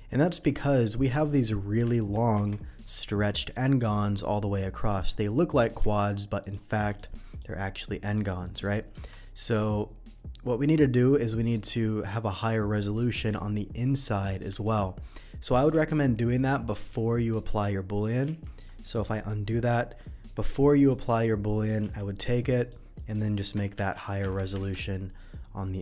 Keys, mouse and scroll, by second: 0.6 middle click, 1.9 shift+middle click, 2.3 Tab, 2.8 click, 4.3 middle click, 5.8 Tab, 6.4 click, 6.9 click, 7.3 click, 8.1 click, 8.4 click, 9.4 click, 11.6 Tab, 13.3 middle click, 14.8 ctrl+z, 15.3 ctrl+z, 20.7 click, 21.0 click, 21.9 q, 22.2 click, 22.6 click, 23.0 middle drag, 23.4 Tab, 23.9 ctrl+Tab, 24.7 ctrl+r.